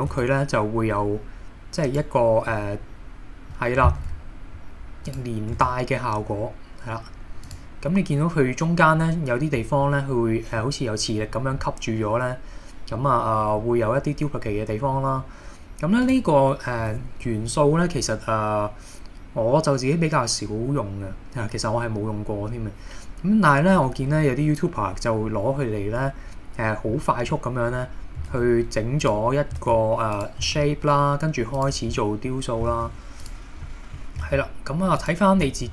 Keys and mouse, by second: 0.2 shift+d, 1.9 click, 2.5-3.5 middle drag, 4.0 shift+d, 5.1 click, 5.6 shift+d, 7.5 click, 9.8 middle click, 11.6-13.7 middle drag, 15.0-15.3 middle drag, 16.1 click, 24.2 KP_1, 26.9-27.3 middle drag, 28.4 shift+d, 29.1 click, 29.6 shift+d, 30.1 click, 30.5 shift+d, 31.6 click, 32.0 middle drag, 33.3 click, 33.7 middle drag, 34.3 shift+d, 35.0 click.